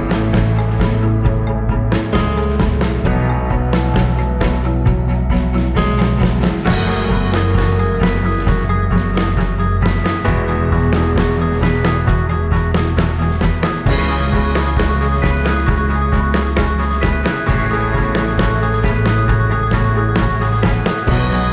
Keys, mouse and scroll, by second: 0.8 ctrl+z, 2.4 right click, 4.0 click, 5.8 click, 8.1-9.0 typing, 9.3 click, 10.4-10.8 scroll down 2, 10.9 alt+middle click, 11.2 scroll up 2, 11.5-12.0 alt+drag, 12.8 alt+click, 13.4 alt+middle click, 13.4 scroll down 1, 14.2 click, 17.1-18.0 drag, 18.2 alt+click, 20.1 alt+click.